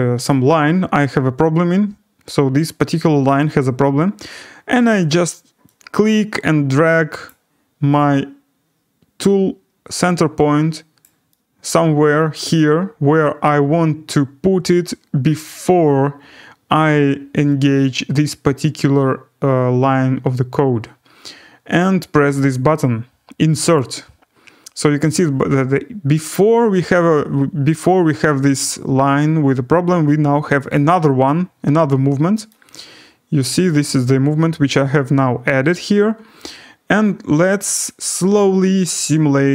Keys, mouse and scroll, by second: 0.2 click, 7.2 click, 11.0 click, 11.7 right click, 11.9-12.2 scroll down 4, 14.0 right click, 23.7 click, 30.7 click, 31.5-32.2 scroll, 32.2-33.2 scroll, 33.4 right click, 37.8 click.